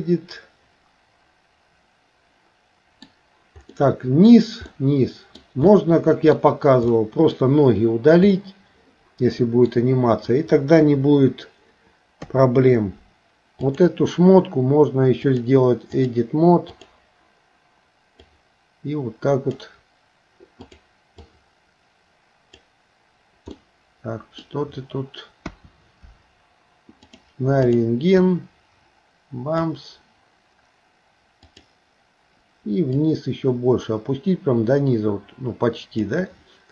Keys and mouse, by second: 3.7 middle click, 4.7 middle click, 5.7 middle click, 7.0 middle click, 8.4-9.7 middle drag, 10.8 KP_3, 12.3 KP_3, 15.3 click, 16.7 click, 18.3-19.6 drag, 20.7 click, 21.3-22.6 drag, 23.6 middle click, 25.5 KP_1, 27.2 click, 28.3-29.7 drag, 31.5 click, 33.1-36.1 drag.